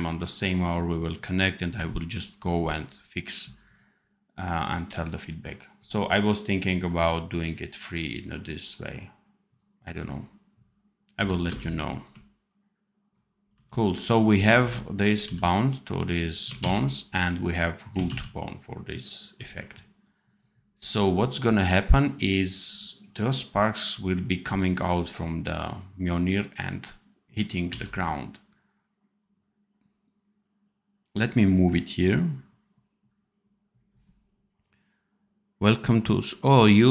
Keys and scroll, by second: 11.1 v, 11.4 space, 13.4 c, 14.5 ctrl+z, 15.1 v, 16.5 ctrl+z, 27.6 v.